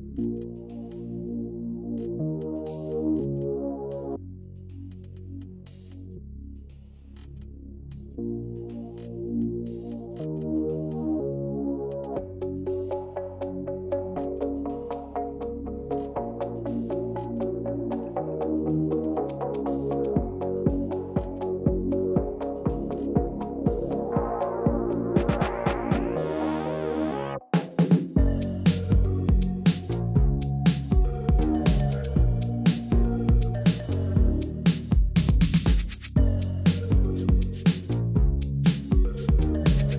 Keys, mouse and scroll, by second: 0.6-3.2 typing, 1.0 click, 1.6 click, 3.0 click, 3.4 click, 4.2 s, 4.3 z, 4.8 click, 5.0 middle click, 5.7 Tab, 6.7 click, 7.3 click, 8.0 Delete, 8.5 middle click, 9.1 Delete, 9.6 middle click, 10.2 ctrl+r, 12.3 s, 12.4 z, 13.5 click, 13.8 middle click, 16.3-19.0 shift+drag, 19.2 middle click, 21.1 shift+click, 21.7-23.3 shift+drag, 23.5-23.8 middle drag, 24.7 shift+click, 25.0 shift+click, 25.3-25.7 middle drag, 26.1-26.6 shift+drag, 27.0-29.6 shift+drag, 29.8 middle click, 30.6 shift+click, 31.5-32.9 shift+drag, 33.0 middle click, 34.0 shift+click, 35.0-36.4 shift+drag, 36.5 middle click, 39.4 shift+click, 39.6-39.9 middle drag.